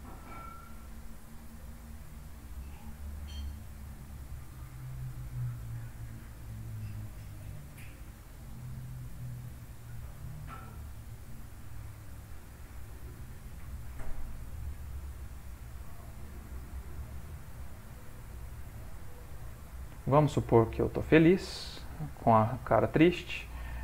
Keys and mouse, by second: 1.6 click, 1.9 g, 3.8 click, 4.1 g, 6.1 click, 6.9 g, 9.0 click, 10.4 click, 11.2 g, 13.7 click, 14.5 g, 17.7 middle click, 19.4 Tab, 19.8 ctrl+middle click, 20.3 middle click, 20.9 middle click, 23.0 click.